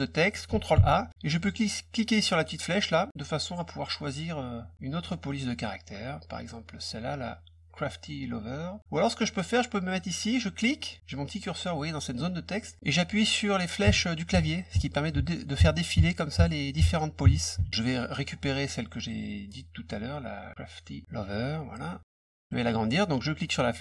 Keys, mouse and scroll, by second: 0.7 ctrl+a, 1.3 click, 2.1 click, 2.6 click, 5.2 click, 10.7 click, 18.2 middle click, 18.2-19.1 scroll down 3, 18.6 middle click, 18.9 middle click, 22.1 click, 23.3-23.8 drag.